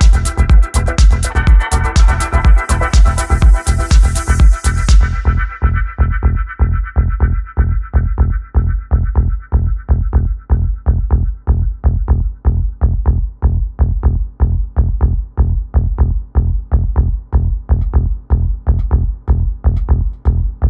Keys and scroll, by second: 0.5-1.7 typing, 6.5 a, 18.7-20.0 typing.